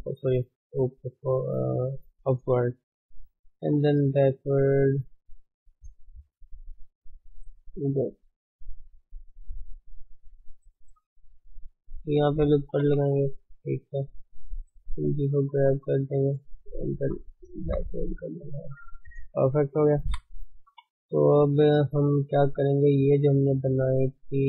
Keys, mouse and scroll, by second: 0.1-1.1 shift+middle drag, 1.1 a, 2.1 click, 3.1 g, 4.9 click, 5.2 g, 6.8 click, 6.9 g, 8.6 click, 8.8 g, 9.8 click, 10.1 g, 11.5 shift+z, 12.6 ctrl+r, 13.4 shift+z, 14.0 click, 14.9 g, 16.6 click, 16.7 g, 17.7 shift+z, 18.1 Tab, 18.4 scroll down 3, 18.6-22.8 middle drag, 19.2 ctrl+s, 20.4-20.8 scroll up 2, 20.8 Tab, 22.8 click, 23.0 scroll down 3, 23.4-24.4 middle drag.